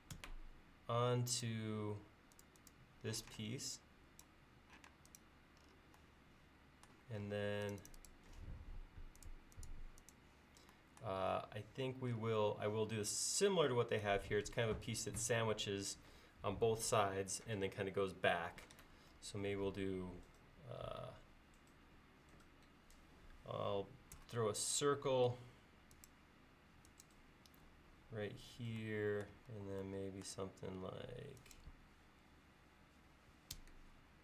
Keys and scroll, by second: 0.2 a, 3.2 p, 4.9 space, 24.2 c, 29.5 l.